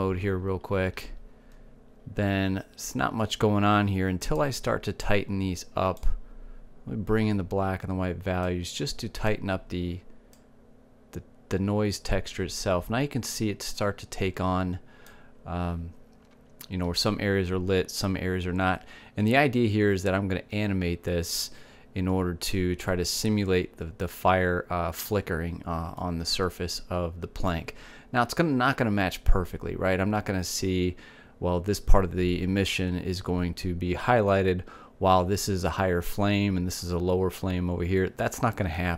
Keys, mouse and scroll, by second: 2.5 shift+z, 5.9-8.6 drag, 10.1 click, 13.4 click, 27.7-29.5 middle drag.